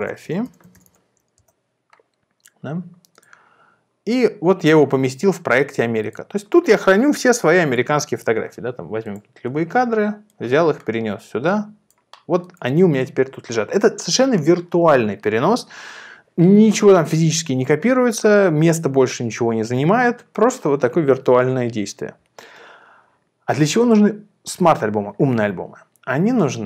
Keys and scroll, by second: 0.0-1.3 typing, 1.4 Return, 9.5 super+ф.